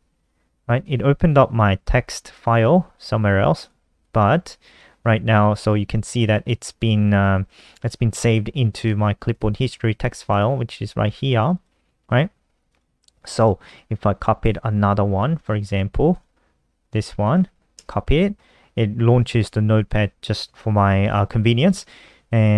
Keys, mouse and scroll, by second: 0.5 click, 3.2 click, 3.7 click, 5.3 click, 9.0 click, 10.0 click, 11.1 click, 11.2 click, 12.4 click, 13.1 click, 13.9 click, 15.1 click, 15.8 click, 17.0 shift+click, 17.5 ctrl+c.